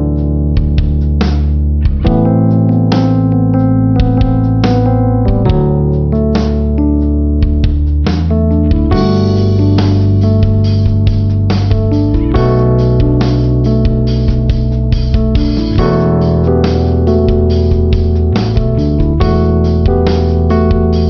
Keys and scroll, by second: 1.5 ctrl+-, 3.7 ctrl+=.